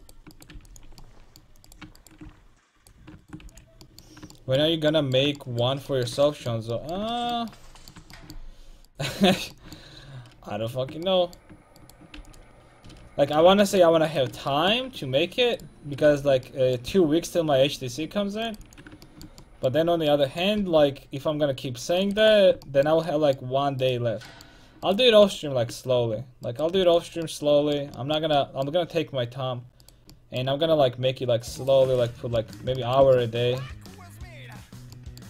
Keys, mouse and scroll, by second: 0.6 x, 2.3 x, 3.5 x, 8.9-11.2 right drag, 11.2 middle click, 11.8-16.5 right drag, 12.2 x, 16.1 click, 16.1 x, 16.9 c, 18.6 x, 20.6 c, 22.2-24.0 drag, 22.2 x, 22.7-25.4 middle drag, 23.9-25.4 right drag, 26.5 right click, 26.8 x, 28.6-29.9 middle drag, 32.0 x.